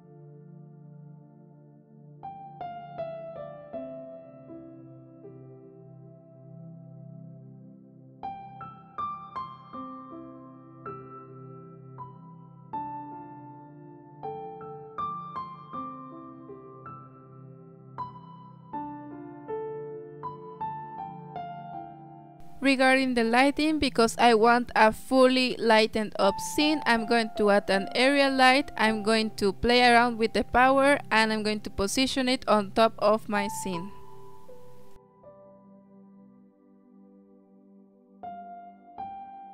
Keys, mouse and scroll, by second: 2.1 middle click, 2.6 drag, 3.2 click, 4.2-5.2 drag, 5.7-6.9 drag, 6.9 middle click, 7.1 click, 8.9 click, 10.4 click, 12.5 click, 14.7 click, 19.8 middle drag, 20.1-20.4 scroll down 8, 20.4-21.2 shift+middle drag, 21.2 click, 22.0 click, 23.0 alt+r, 23.2 scroll down 4, 23.4 shift+middle click, 23.8 s, 25.0 scroll down 1, 25.2 KP_7, 25.7 g, 26.7-27.3 middle drag, 27.3 g, 27.7 KP_0, 28.5 click, 28.9 z, 30.2 click, 30.5 KP_0, 35.0 click, 35.8 click.